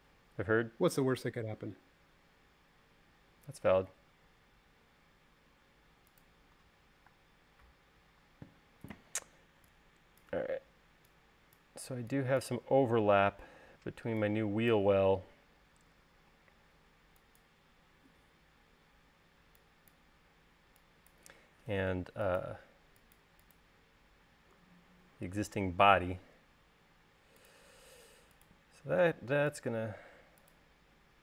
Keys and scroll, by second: 8.0 space, 9.2 e, 27.0 l, 29.7 l.